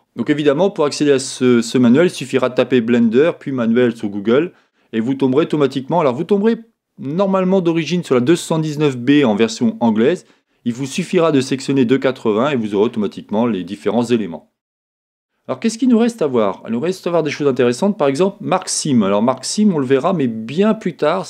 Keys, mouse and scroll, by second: 0.0-4.4 middle drag.